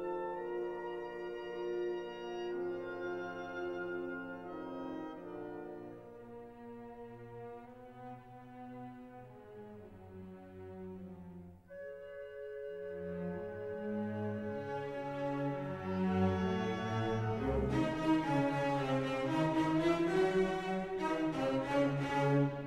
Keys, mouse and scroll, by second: 0.0 click, 1.4 middle click, 2.2-3.8 middle drag, 5.5 click, 7.9 click, 11.0-13.7 drag, 14.1-15.6 middle drag, 17.0 click, 18.0 click, 19.0-21.8 drag, 20.0 KP_0.